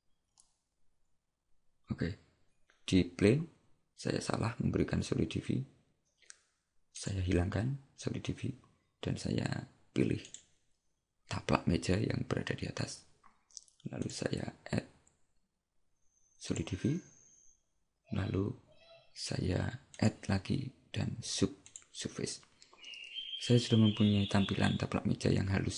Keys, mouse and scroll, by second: 2.0-2.3 scroll down 1, 7.0 click, 10.4 right click, 14.1 click, 20.0 click.